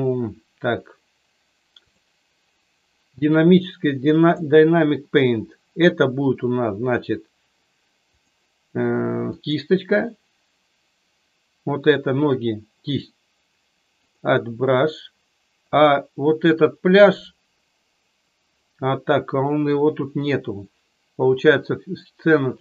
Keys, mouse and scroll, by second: 4.2 click, 8.1-9.6 drag, 14.0 click, 15.6 click.